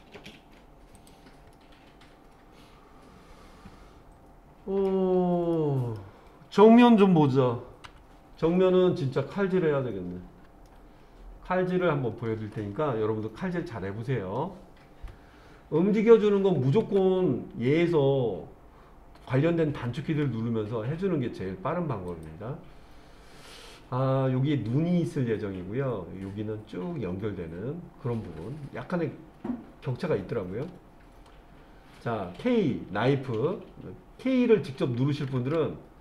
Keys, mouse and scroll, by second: 1.0 click, 1.5-4.9 middle drag, 5.5 middle click, 7.9 KP_1, 9.7-10.5 scroll up 3, 10.7-11.7 shift+middle drag, 22.1 click.